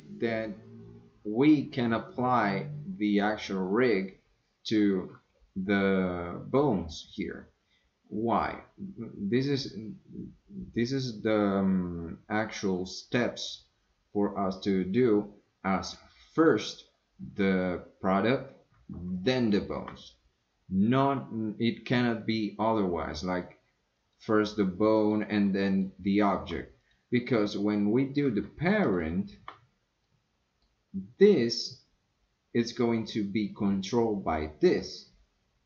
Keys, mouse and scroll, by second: 16.3 click, 19.2 shift+click, 23.9 click, 25.0 click, 25.7 shift+click, 26.8 click, 28.8 shift+click, 30.1-30.6 middle drag.